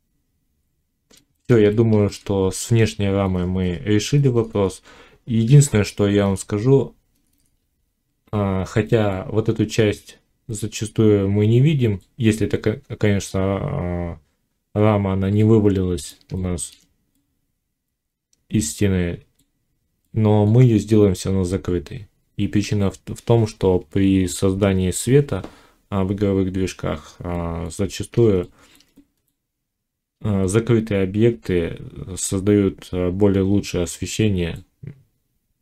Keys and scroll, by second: 1.5 Tab, 3.1 Tab.